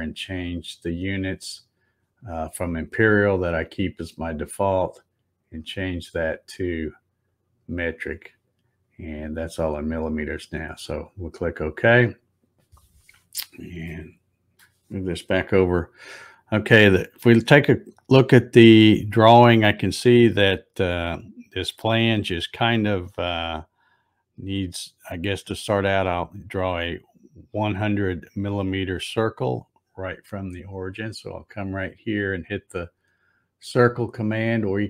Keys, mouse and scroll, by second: 0.5 click, 6.2 click, 7.3 click, 11.2 click, 13.9 shift+middle click, 34.6 click.